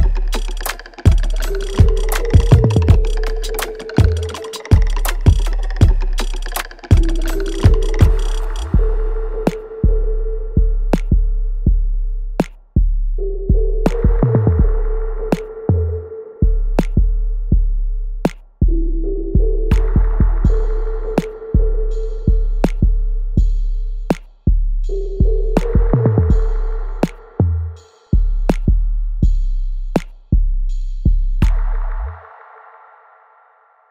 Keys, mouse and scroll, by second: 0.0 right click, 0.6 click, 0.9 alt+right click, 1.3 alt+click, 2.8-6.9 alt+drag, 6.9 ctrl+s, 7.4 scroll up 1, 7.8 alt+click, 9.1 click, 10.3 ctrl+s, 10.9 alt+right click, 11.3 alt+click, 12.5 alt+right click, 13.2 alt+click, 14.0 alt+right click, 14.5 click, 14.6-17.9 alt+drag, 17.9 space, 19.0 alt+right click, 19.4 alt+middle click, 20.7 click, 22.3 alt+middle click, 23.3-24.8 alt+right drag, 24.8 click, 25.7 right click, 26.9 click, 28.1 w, 28.8-33.5 drag, 33.5 right click.